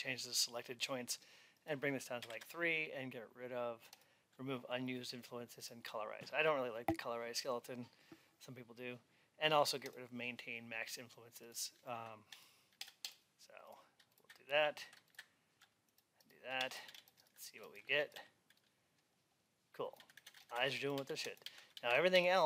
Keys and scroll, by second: 2.2 Return, 16.7 alt+x.